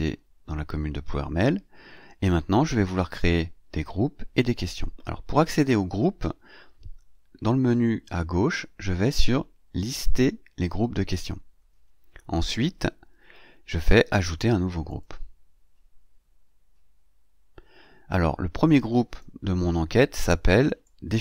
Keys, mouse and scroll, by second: 7.7 scroll down 2, 8.5 scroll down 2, 11.9-12.3 scroll up 2, 14.7 click, 19.0 click, 20.7-21.2 drag.